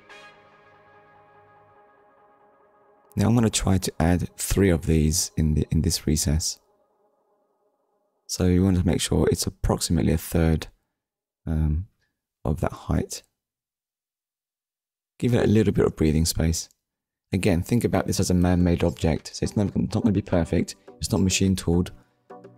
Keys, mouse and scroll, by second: 1.2 click, 4.6 middle click, 5.7-6.1 scroll down 2, 6.1 shift+middle click, 6.5 middle click, 7.3-7.8 scroll up 1, 11.3 KP_3, 13.0 scroll up 1, 17.3 click, 18.4 scroll down 1, 19.0 shift+middle click, 22.2-22.5 scroll up 2.